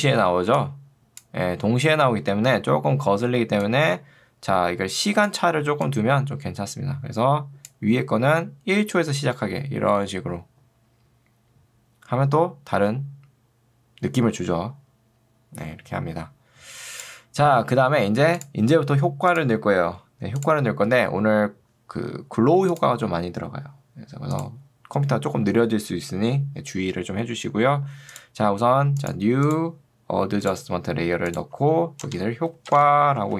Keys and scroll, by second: 2.1 Escape, 32.1-33.3 typing.